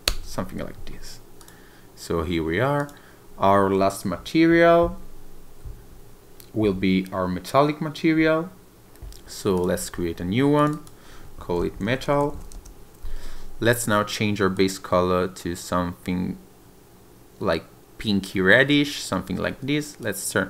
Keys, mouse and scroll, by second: 1.4 click, 2.8 click, 9.5 click, 10.6 click, 10.7 click, 13.7 click, 18.6-20.0 scroll up 1, 20.0 click.